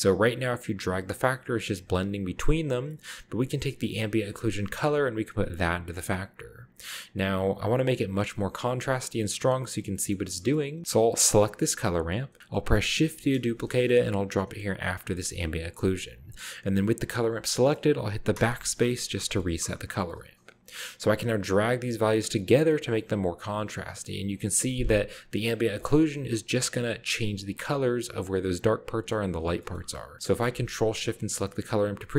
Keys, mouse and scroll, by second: 2.4 click, 2.6 middle click, 3.5 click, 4.4-5.5 drag, 7.3-9.0 scroll down 2, 9.2-10.8 scroll up 2, 10.1 middle drag, 11.1 middle click, 11.5 click, 12.9 shift+d, 14.9 click, 17.1 click, 17.5 middle click, 17.8-18.1 scroll up 2, 18.4 BackSpace, 18.9 scroll up 1, 19.2-19.8 middle drag, 20.5-21.5 scroll up 1, 21.5-21.9 drag, 22.4-22.9 drag, 23.0-24.0 scroll down 1, 24.1-24.9 drag, 25.3-25.7 drag, 26.0-26.4 scroll up 1, 29.6-30.9 middle drag, 31.2 ctrl+shift+click.